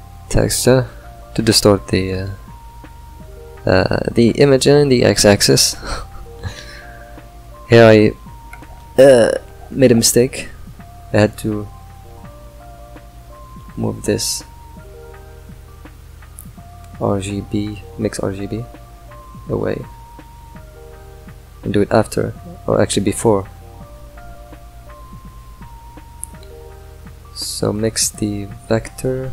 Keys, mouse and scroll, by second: 9.9 ctrl+right click, 10.7-11.4 middle drag, 11.4 ctrl+right click, 12.0 click, 14.3 ctrl+right click, 16.1 click, 16.6 shift+click, 26.9 click, 28.0 click.